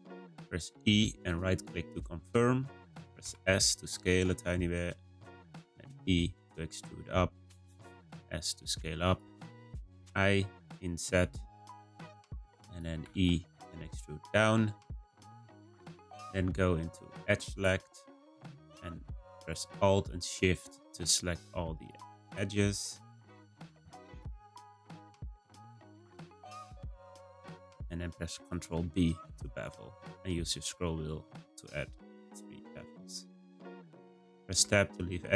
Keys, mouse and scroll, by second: 0.7 e, 3.2 s, 5.7 e, 8.0 s, 10.0 i, 13.0 e, 17.4-20.6 drag, 21.7 click, 22.0 click, 23.0 shift+click, 23.2 shift+click, 23.9 shift+click, 24.1 shift+click, 24.4 scroll down 1, 24.5 middle click, 25.0-26.1 scroll up 1, 26.1 shift+click, 26.3 shift+click, 27.1 shift+click, 27.3 shift+click, 27.7 middle click, 28.8 b, 34.5 Tab.